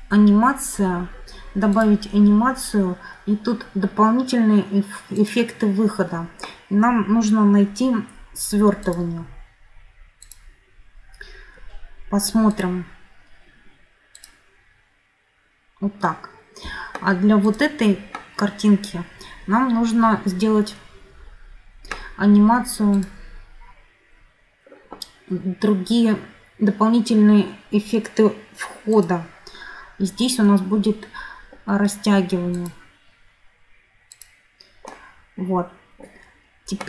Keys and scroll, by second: 16.5 Escape.